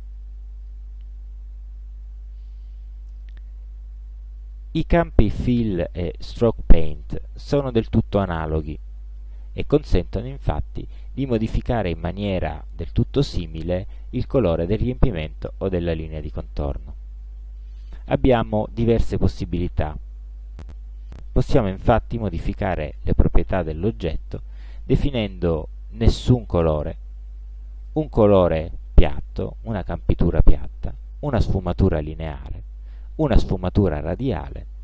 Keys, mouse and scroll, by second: 0.0 click, 0.7 click, 3.2 click, 5.9 click, 7.5 click, 8.8-9.1 ctrl+scroll down 1, 9.5-10.2 ctrl+drag, 10.4 ctrl+scroll up 1, 11.1 ctrl+click, 15.7 click, 22.2 ctrl+scroll down 2, 22.6 ctrl+scroll up 2, 23.1 ctrl+click, 24.0 ctrl+scroll down 2, 26.4 click, 27.9 click, 31.3 click, 33.3 click.